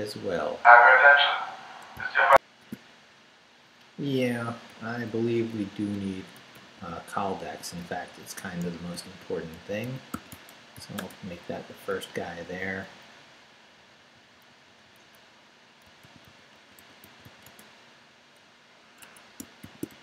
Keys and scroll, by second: 2.3 alt+shift+super+z, 4.7 Up, 5.1 Right, 6.1 Right, 6.3 Right, 7.5-11.0 typing, 11.5 Up, 13.1 Up, 13.8 Right, 15.6-17.7 typing, 19.0 Escape, 19.6 shift+;, 19.9 shift+w.